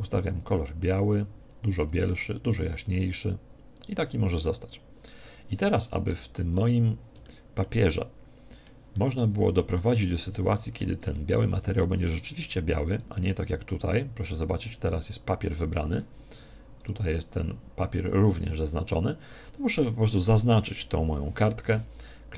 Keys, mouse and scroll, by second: 1.5-3.9 drag, 6.0 Tab, 6.5-12.8 middle drag, 9.5 z, 12.8-15.8 right drag, 16.7 right click.